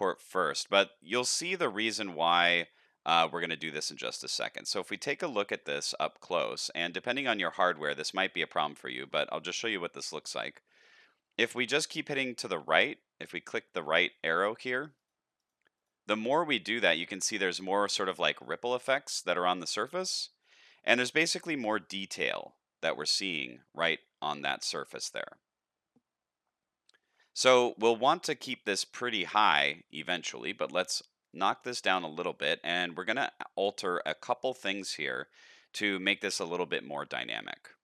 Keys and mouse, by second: 1.5-1.9 middle drag, 2.6-3.0 shift+middle drag, 3.3-3.8 middle drag, 5.0-5.5 shift+middle drag, 5.8-8.0 middle drag, 8.3-8.9 shift+middle drag, 9.2 middle click, 9.8-10.1 shift+middle drag, 11.7 click, 12.1 click, 12.3 click, 12.8 click, 13.8 click, 14.6 click, 15.1 click, 15.4 click, 16.3-17.2 shift+middle drag, 17.4-18.4 middle drag, 20.7-21.1 shift+middle drag, 21.3 middle click, 22.4-26.9 middle drag, 29.8 click, 30.0 click, 30.7 click, 31.4 click, 34.9 middle click, 35.9 shift+middle click.